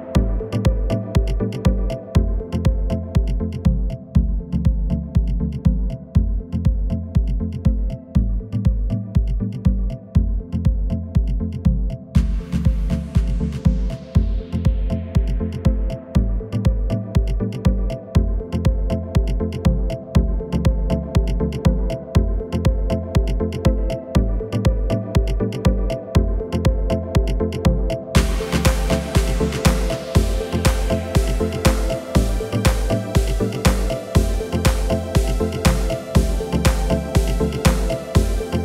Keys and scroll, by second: 1.4 shift+a, 5.8 s, 8.3 g, 9.2 z, 11.5 s, 18.6 g, 19.2 z, 21.8 Tab, 25.9 Delete, 27.9 KP_1, 30.1 a, 32.2 s, 32.4 z, 35.6 s, 37.9 z.